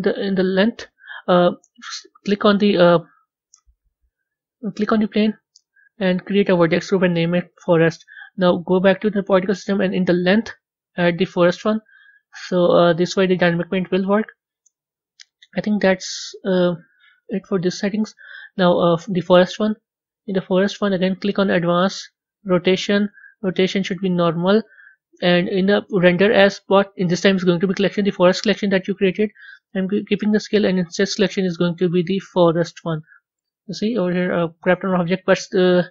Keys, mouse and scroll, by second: 1.9 click, 4.2-6.8 scroll down 2, 8.1 click, 11.3-19.2 drag, 21.3 click, 22.4 click, 23.9-33.5 drag, 33.5-35.9 middle drag.